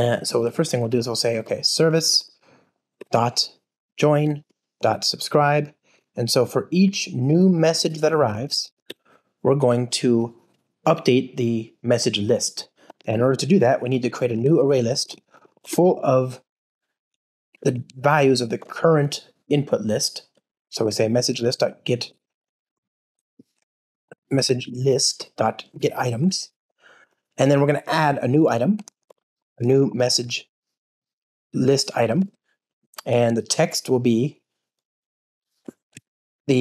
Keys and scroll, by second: 2.9 Return, 17.6 alt+Return, 20.7 Return, 23.6 Return, 23.6 super+z, 24.0 alt+shift+Left, 31.9 Return, 35.9 Escape.